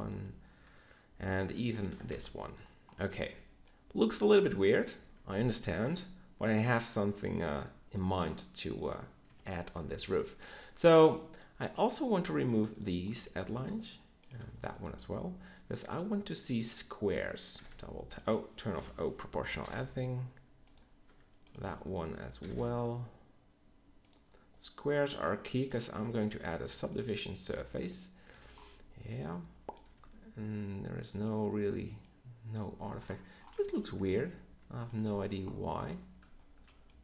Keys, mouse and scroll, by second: 2.1 x, 3.2 Tab, 7.5 Tab, 9.2 KP_3, 12.2 x, 14.5 x, 17.5 g, 18.7 o, 19.6 g, 22.4 g, 26.0 Tab, 29.9 g, 31.5 Tab, 34.0 Tab, 34.6 Tab, 35.0 z.